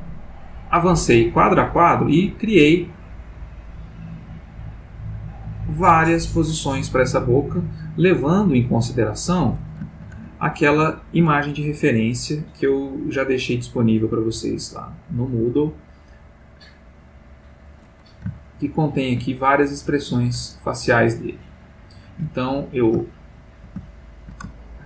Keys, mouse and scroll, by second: 10.1 ctrl+z, 11.8 middle click, 13.7 click, 17.4 click, 18.4-19.2 shift+middle drag, 21.8 click, 23.1-24.4 ctrl+middle drag.